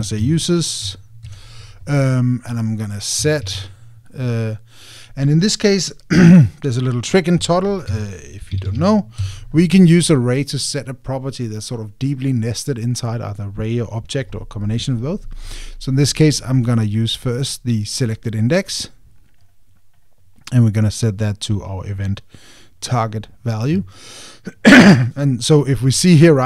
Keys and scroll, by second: 2.0 Return, 10.0 Return.